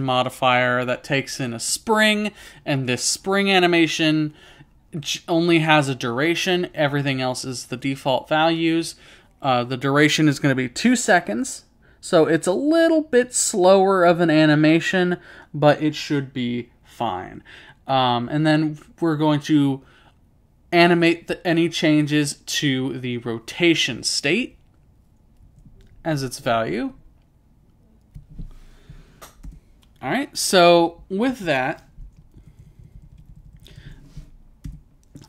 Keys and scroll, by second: 24.5 typing, 25.5-27.1 typing, 32.0-34.1 typing, 32.6 Return.